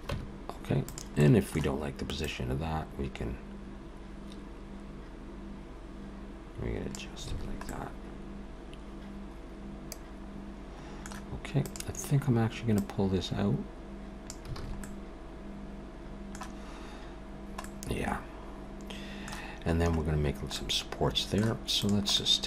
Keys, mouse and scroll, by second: 0.1 Tab, 0.9 click, 1.2 middle click, 2.2 click, 7.3 alt+a, 7.7 middle click, 11.6 click, 12.8 click, 14.6 alt+a, 14.8 middle click, 17.6 middle click, 20.6 middle click, 21.8 click, 22.1 middle click.